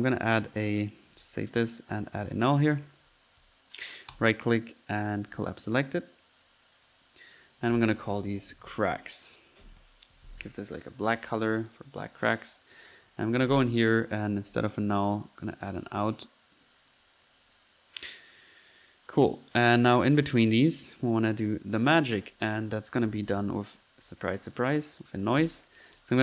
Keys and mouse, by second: 1.0 ctrl+click, 1.2 ctrl+s, 1.5-2.8 typing, 3.0 ctrl+drag, 3.4 drag, 4.2-4.5 right drag, 6.4 click, 6.9-7.2 drag, 7.4 click, 10.1 ctrl+c, 11.0 typing, 11.1 drag, 11.7 click, 12.1 click, 12.5 drag, 12.8-13.8 middle drag, 14.3 click, 14.6 Delete, 15.2 right click, 16.0 u, 17.0-17.7 drag, 18.4 click, 18.7-19.2 drag, 19.4 click, 19.8 drag, 20.6 click, 21.2 click, 21.7 drag, 22.3 right drag, 22.7 click, 22.8-23.9 typing, 23.9 click, 24.5 click, 26.0 click.